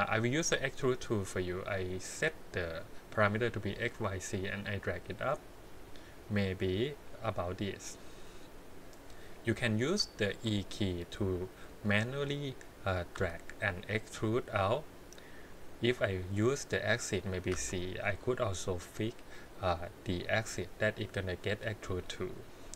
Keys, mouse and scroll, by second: 0.4 click, 2.7 click, 4.7-8.2 drag, 9.7 scroll down 2, 10.1 shift+middle click, 11.8 click, 13.1 e.